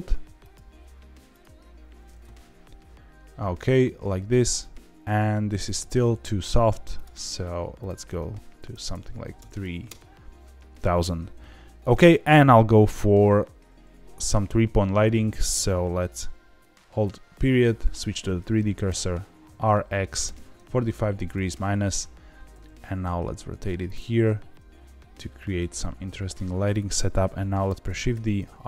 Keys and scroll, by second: 5.6 g, 5.8 z, 9.8 KP_0, 18.8 r, 19.4 x, 20.2 KP_4, 20.3 KP_5, 21.0 KP_Subtract, 21.3 KP_Enter, 22.4 r, 22.6 z, 24.0 g, 24.2 z, 27.8 shift+d, 28.1 r, 28.3 z.